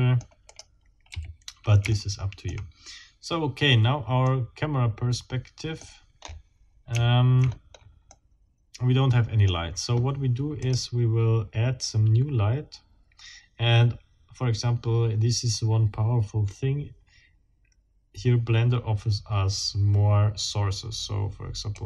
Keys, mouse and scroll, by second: 0.5 click, 1.1 a, 1.9 shift+middle click, 3.3 shift+scroll up 2, 4.3-5.8 middle drag, 5.8-6.6 scroll up 4, 7.4 shift+scroll down 2, 8.1 shift+middle click, 8.4-9.6 middle drag, 10.6 click, 21.7 click.